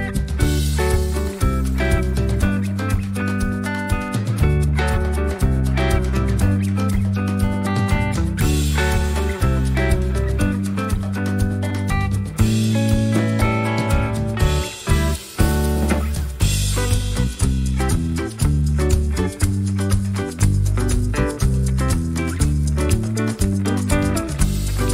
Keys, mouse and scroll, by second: 0.3 ctrl+click, 1.8 ctrl+g, 2.4 ctrl+click, 3.5 click, 4.9-6.9 drag, 6.9 click, 7.7 click, 8.7-14.8 drag, 15.2 click, 16.1 click, 17.0 click, 17.8-20.2 drag, 20.8-21.2 ctrl+scroll down 2, 21.9 ctrl+click, 22.5-24.9 ctrl+drag.